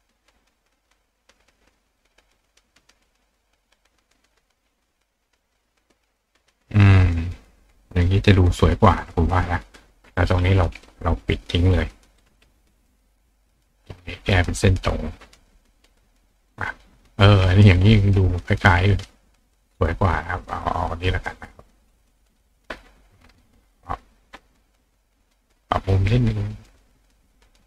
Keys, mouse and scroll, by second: 0.4-0.8 drag, 2.0-3.1 drag, 4.1-5.6 drag, 6.3 click, 9.5-11.1 drag, 11.7-12.2 drag, 13.6 click, 14.0 click, 15.6 click, 15.9 click, 16.1-16.5 drag, 16.6 click, 18.0 click, 19.4 click, 19.8 click, 19.8-24.9 right drag, 20.5 click, 21.2-22.3 drag, 23.6 click, 24.8-25.8 drag, 27.1-27.4 drag, 27.5-27.6 drag.